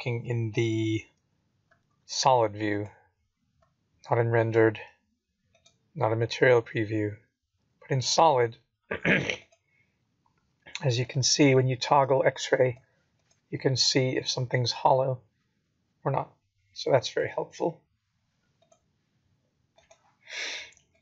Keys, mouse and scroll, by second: 0.2 z, 3.9 z, 6.2 z, 8.1 z, 9.9 z, 12.1 click, 12.7 click, 13.5 middle click, 20.1 scroll down 1, 20.3 middle click, 20.9 middle click.